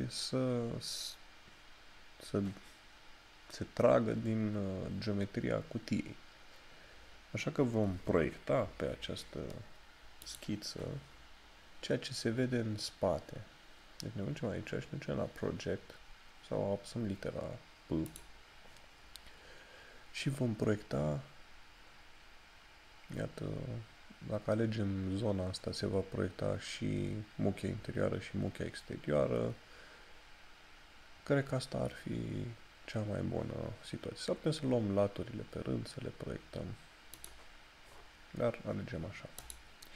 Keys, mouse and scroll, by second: 10.4 click, 19.4 click, 37.2 click.